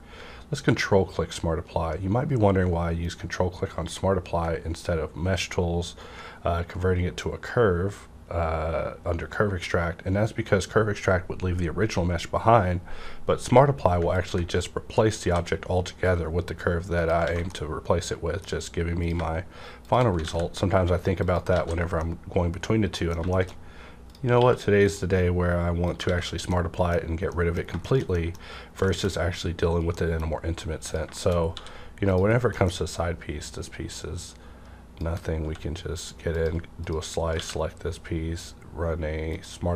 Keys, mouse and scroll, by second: 14.0 ctrl+Num_Lock, 14.0 q, 14.1 click, 15.2 s, 17.2 alt+a, 17.5-19.8 middle drag, 19.0 click, 19.8 shift+click, 20.2 alt+x, 21.2 shift+click, 21.2 alt+x, 21.5 alt+a, 21.8 scroll down 1, 21.9-23.3 middle drag, 23.3 shift+middle click, 23.5 scroll up 1, 24.0 click, 24.3 q, 24.7 click, 24.9 click, 25.9 click, 26.0 alt+a, 26.2 scroll down 1, 26.4 middle click, 28.1 middle click, 28.4 scroll up 1, 28.9 shift+middle click, 29.8 shift+middle click, 30.3 scroll up 1, 30.9 click, 31.1 shift+middle click, 31.4 scroll up 1, 31.5 d, 32.0 click, 32.2 scroll down 1, 32.5 middle click, 33.4-36.3 drag, 35.4 x, 36.8 click, 37.4 q, 39.2 click.